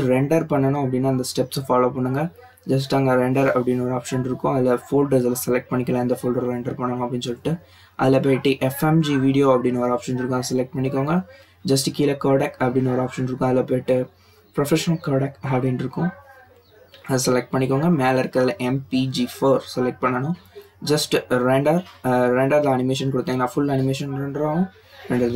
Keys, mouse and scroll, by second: 0.9-1.4 scroll down 6, 2.7 click, 5.0 click, 6.8-7.2 scroll down 5, 7.2-9.4 drag, 9.4-10.1 scroll down 7, 10.5 click, 11.0-12.7 scroll down 5, 12.7-15.0 drag, 15.0 scroll down 4, 15.9-18.9 drag, 18.9 scroll down 3, 21.1-23.4 drag.